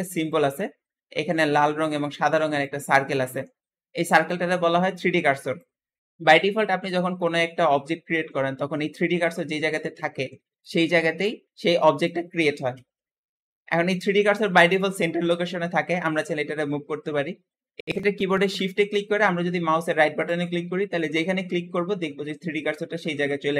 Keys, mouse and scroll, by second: 6.0-6.8 scroll up 4, 6.8-8.3 scroll down 6, 8.3-11.2 scroll up 4, 13.1-15.6 scroll down 4, 15.6-17.4 shift+middle drag, 17.4 scroll down 1, 20.1-23.1 shift+right drag.